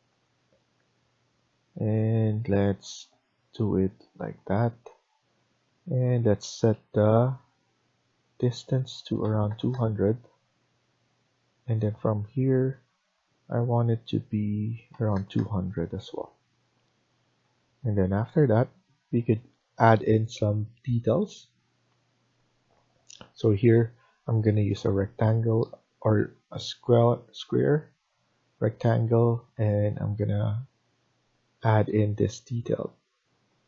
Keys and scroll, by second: 5.0 Escape, 5.2 Escape, 9.1 typing, 10.0 Return, 10.6 Escape, 14.5-15.3 typing, 15.7 Return, 16.2 Escape, 31.9 Escape, 32.2 Escape.